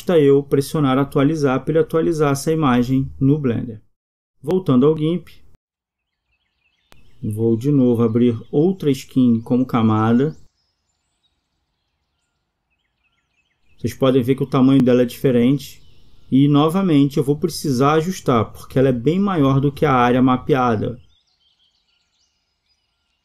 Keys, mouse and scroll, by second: 1.0 Escape.